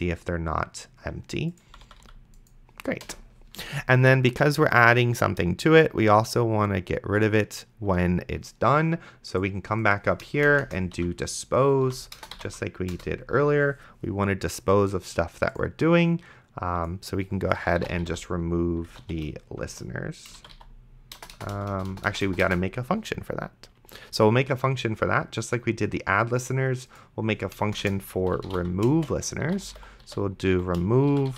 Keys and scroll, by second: 1.9 d, 3.0 BackSpace, 10.7 Return, 10.9-12.9 typing, 17.6-22.5 typing, 27.9 Return, 27.9-31.3 typing.